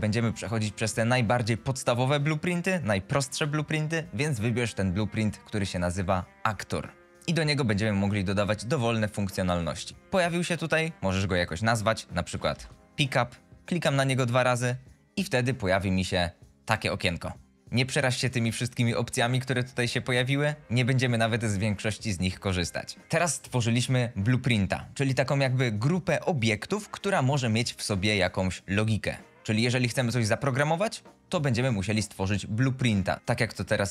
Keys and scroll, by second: 12.8 Return, 12.8 i.